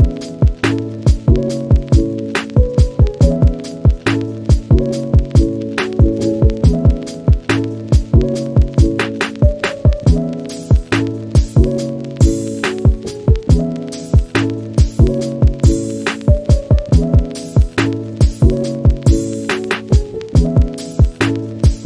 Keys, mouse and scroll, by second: 0.0 middle drag, 0.3 scroll up 1, 0.4 click, 0.6-1.7 middle drag, 1.7-2.1 scroll down 2, 1.9 middle drag, 2.3 scroll up 1, 2.5 middle click, 3.0 click, 3.2 shift+middle click, 3.4-4.0 scroll up 1, 4.0 click, 4.2 scroll down 1, 4.4 scroll up 1, 4.6-8.7 shift+middle drag, 8.7 click, 13.8-14.5 scroll up 1, 15.1 click, 15.5 shift+middle click, 15.6-16.1 scroll up 3, 15.8 shift+middle click, 16.4 click, 16.7 scroll down 2, 16.8 middle click, 17.2 scroll up 1, 17.4 middle click, 18.0 scroll up 1, 18.2-19.4 drag, 19.4 scroll down 1, 19.5 middle click, 19.6 scroll up 1, 19.8 click, 20.0 scroll down 1, 20.1 middle click, 20.9 click, 21.1 scroll up 1, 21.3-21.8 drag.